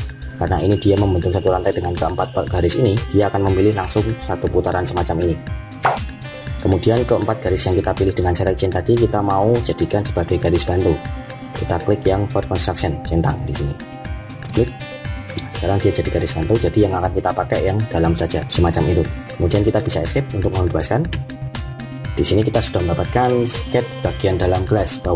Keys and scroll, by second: 19.8 Escape.